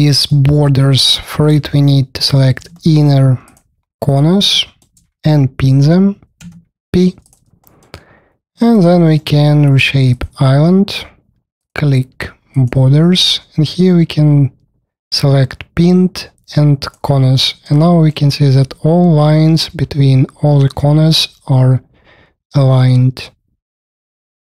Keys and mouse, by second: 0.1 middle click, 2.1 shift+middle click, 3.4 shift+middle click, 4.0 shift+middle click, 6.3 p, 7.1 middle click, 7.4 alt+middle click, 8.4 3, 8.6 middle click, 9.0 alt+middle click, 10.1-12.0 middle drag, 16.8-17.3 drag.